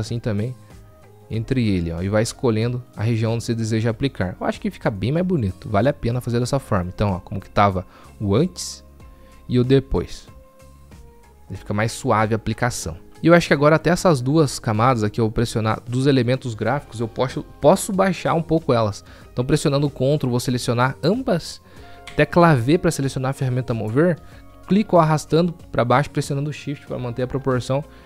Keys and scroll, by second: 22.7 v, 26.6 v.